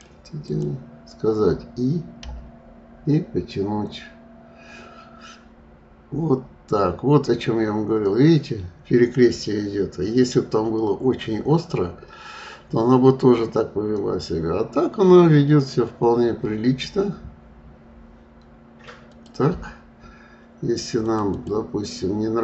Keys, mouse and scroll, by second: 2.1 i, 20.9 click, 21.3 click.